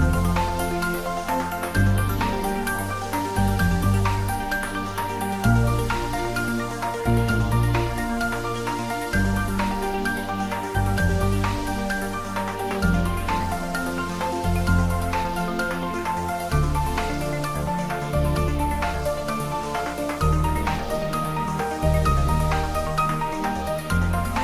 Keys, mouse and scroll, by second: 0.4-0.8 scroll up 1, 3.4-3.9 scroll up 1, 4.0 middle click, 5.2-7.0 scroll down 1, 8.1 scroll up 1, 9.6-13.2 drag, 13.2 scroll down 1, 13.8 middle click, 14.9 click, 15.7-16.1 scroll down 1, 16.1 middle click, 16.8 scroll up 1, 17.1 middle click, 18.1 scroll up 1, 19.0 click, 22.7-23.4 scroll down 1, 23.4-24.4 middle drag.